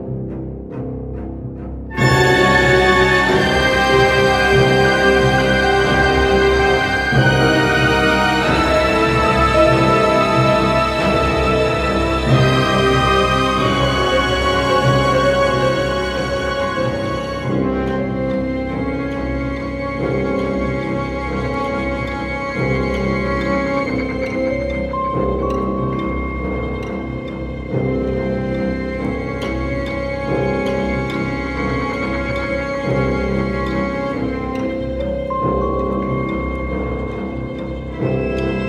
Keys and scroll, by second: 0.2 Tab, 1.4-2.3 typing.